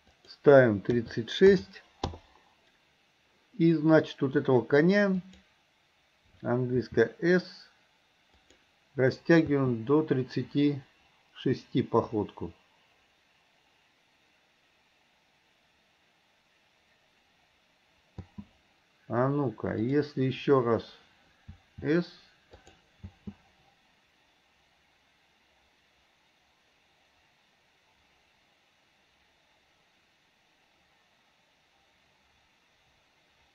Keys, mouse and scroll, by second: 0.1-2.2 drag, 5.4 click, 6.8 s, 9.6 space, 18.2 space, 20.0 drag, 21.5 s, 23.2 space.